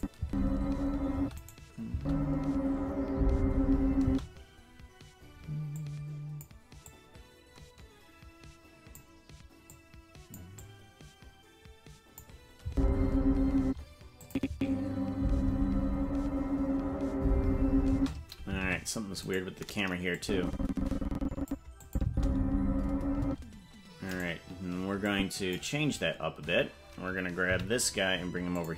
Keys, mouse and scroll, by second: 0.2 space, 1.2 space, 1.5 right click, 1.9 space, 4.1 space, 5.8 click, 6.8-9.0 drag, 9.7 click, 10.6-12.2 drag, 12.6 space, 13.6 space, 14.2 click, 14.5 space, 17.9 space, 18.7 ctrl+Tab, 19.3 right click, 20.2-21.6 drag, 21.8 click, 22.0 space, 23.2 space, 24.1 right click, 25.1 click, 27.5 g.